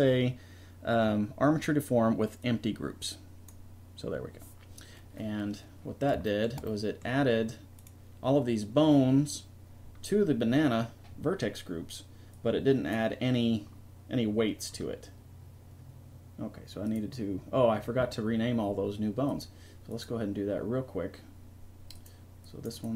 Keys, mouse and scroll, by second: 6.7-8.7 middle drag, 8.7-10.0 drag, 12.3-14.2 middle drag.